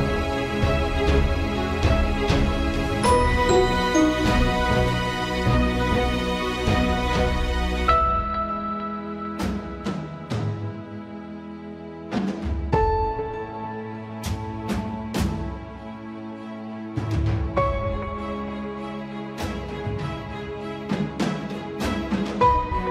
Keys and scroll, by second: 2.1 Up, 2.3 Down, 2.6 Return, 3.7 ctrl+space, 4.1 Return, 5.5 Delete, 6.6 alt+/, 22.1 ctrl+Return.